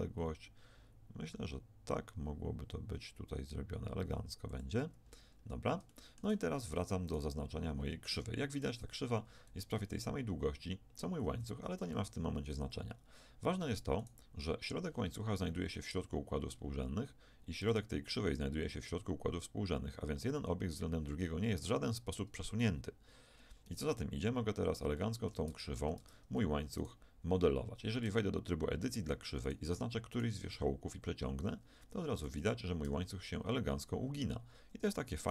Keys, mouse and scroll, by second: 5.0-10.1 middle drag, 9.7 g, 14.0-16.3 right drag, 16.3-17.7 middle drag, 17.7-20.3 right drag, 23.7-24.9 right drag, 24.9 middle click, 25.5 Tab, 26.0 Tab, 26.8 right click, 28.1 Tab, 30.5-31.7 drag, 30.5 g, 31.7 right click, 32.3 z, 32.9 g, 35.2 right click.